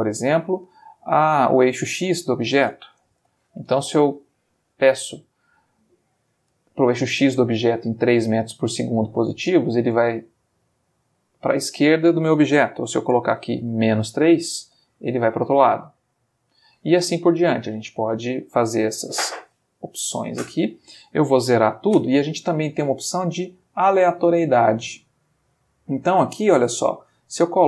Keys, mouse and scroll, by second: 2.1 click, 3.2 3, 3.2 Return, 4.4-4.9 middle drag, 11.1 ctrl+click, 13.2 Home, 14.0 -, 14.7 Return, 20.4 click, 21.7 0, 22.0 Return, 24.9 click, 26.9-27.6 drag.